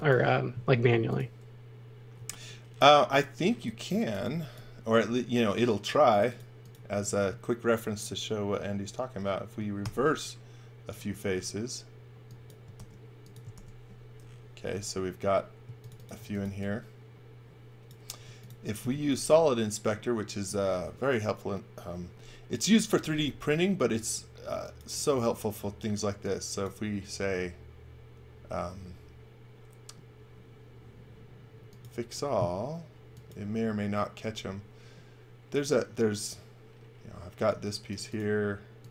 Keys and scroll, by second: 0.6 m, 2.1 space, 3.6-6.0 typing, 9.8 shift+r, 12.7 shift+r, 13.5 shift+r, 15.6-16.8 typing, 18.3 space.